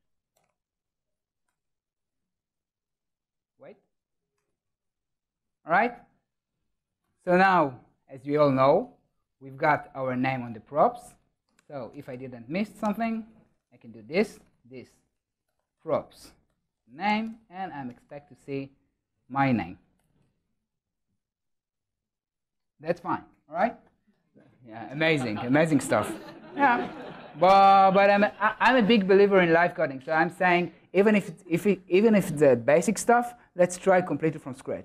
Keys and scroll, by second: 1.5 Return, 10.4 ctrl+alt+shift+Left, 17.3 super+s, 18.1 super+s, 27.0 super+s.